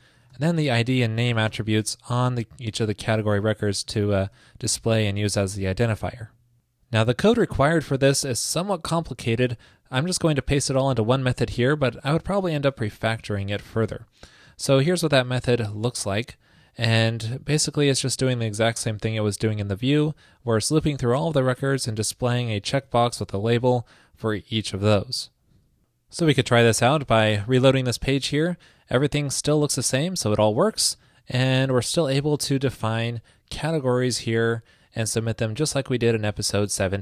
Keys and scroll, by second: 4.1 super+Right, 4.3 super+s, 14.1 super+v, 25.2 super+s, 27.4 super+r.